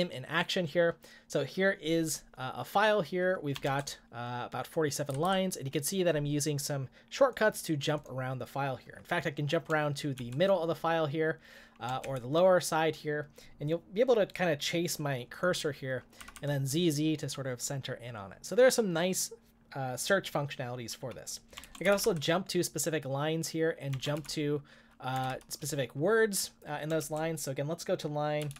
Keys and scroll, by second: 3.7 shift+g, 5.1 g, 5.2 g, 10.2 shift+m, 12.0 shift+l, 16.3 z, 21.6-22.4 typing, 23.9 j, 24.2 shift+o, 25.1 Escape, 25.2 u, 27.0 typing, 28.1-28.5 typing.